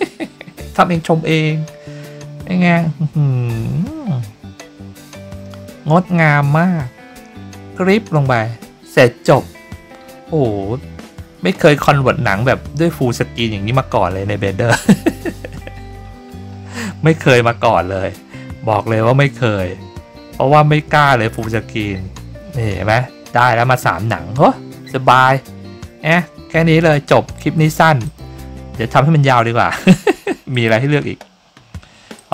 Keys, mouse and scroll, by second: 21.3 click, 28.0 click, 30.5 click, 32.1 click.